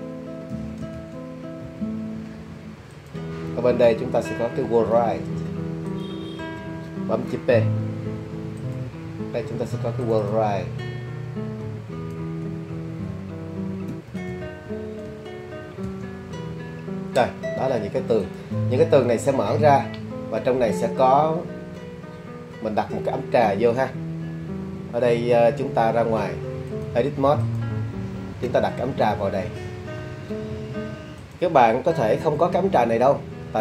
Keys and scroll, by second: 0.5 l, 7.8 p, 11.6-14.3 typing, 15.9 l.